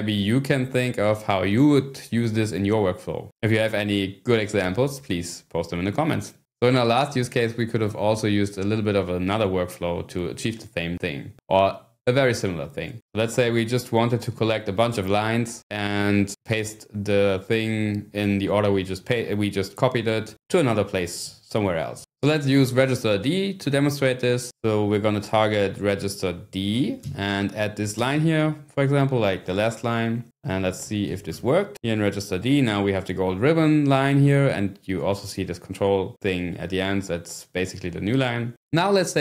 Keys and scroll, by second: 26.5-28.1 typing, 30.4-31.5 typing.